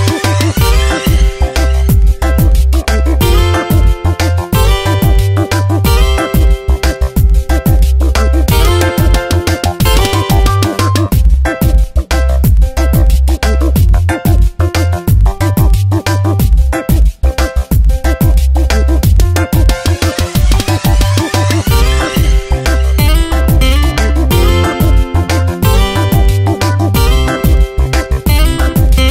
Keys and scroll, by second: 0.0 space.